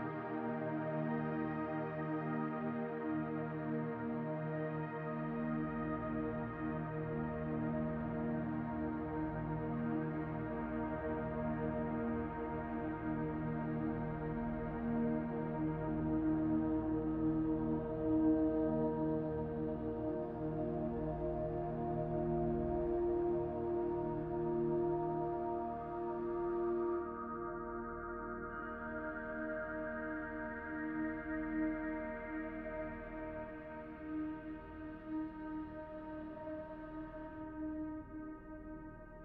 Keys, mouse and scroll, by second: 11.7-16.6 drag, 16.6 g, 20.2 s, 23.1 g, 27.8-29.2 drag, 29.2 g, 30.7 click, 31.4 click, 35.6-36.7 drag, 36.7-37.5 scroll down 4, 38.1-39.2 drag.